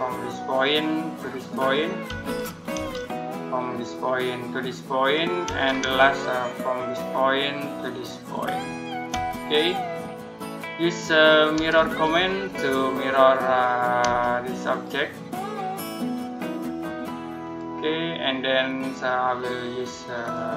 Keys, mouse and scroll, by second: 0.3 click, 1.9 space, 2.2-2.6 scroll up 1, 2.6 space, 3.5 click, 5.3 space, 6.6 click, 9.2-9.8 scroll down 1, 9.8 middle click, 11.4-11.9 typing, 13.9 space, 14.5 click, 20.0 click.